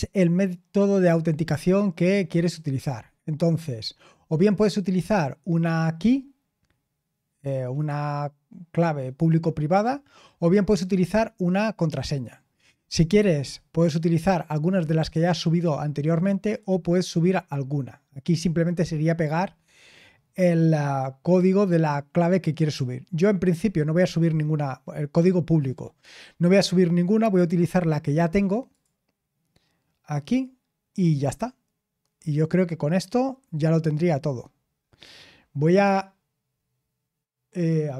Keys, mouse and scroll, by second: 1.2-5.6 scroll down 1, 5.6-8.6 scroll down 1, 8.6-12.1 scroll down 1, 12.1-14.0 scroll down 1, 15.4-16.4 scroll down 2, 16.4 click, 28.7 click, 30.6-33.4 scroll down 5, 33.4-34.3 scroll down 1, 34.3 scroll down 1, 34.4-35.3 scroll up 2, 35.3-35.9 scroll down 2.